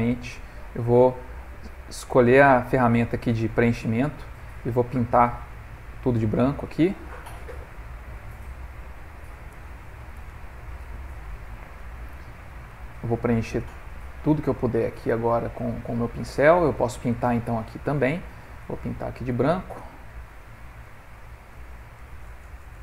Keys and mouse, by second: 0.1 ctrl+middle click, 0.4 middle click, 3.7 click, 4.9 click, 5.6 ctrl+middle click, 6.3 click, 7.3 click, 8.4 click, 9.0 click, 9.4 click, 9.6 click, 11.2 middle click, 12.2 middle click, 12.9 middle click, 15.1 click, 16.2 f, 17.9 click, 21.0 middle click, 22.1 click.